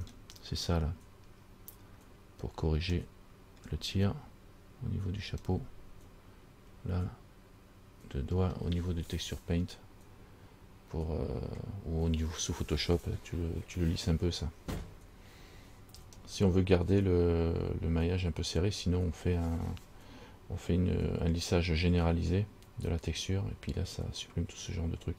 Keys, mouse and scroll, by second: 2.0-2.3 scroll down 3, 3.2 shift+middle click, 5.5-6.2 scroll up 7, 16.4-17.0 scroll down 1, 17.0 scroll down 1, 19.0-19.8 scroll down 1, 19.8 scroll down 1.